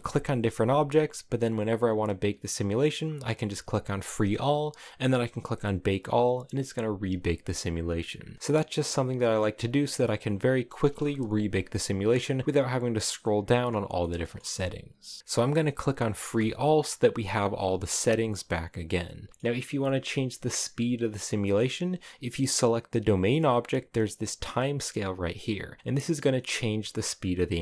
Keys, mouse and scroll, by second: 0.3 right click, 0.8 right click, 3.9-11.2 drag, 11.2 Escape, 13.7-16.2 shift+middle drag, 16.2-19.3 drag, 19.3-20.9 middle drag, 20.9 right click.